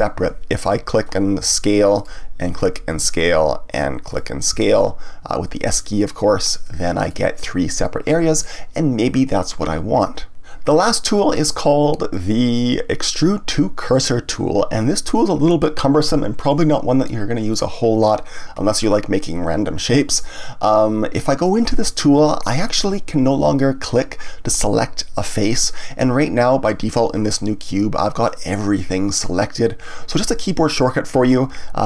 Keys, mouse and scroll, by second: 1.4 s, 2.5 click, 2.9 s, 4.1 click, 4.5 s, 6.0 click, 6.4-9.5 middle drag, 12.1-15.1 drag, 28.3-31.3 middle drag.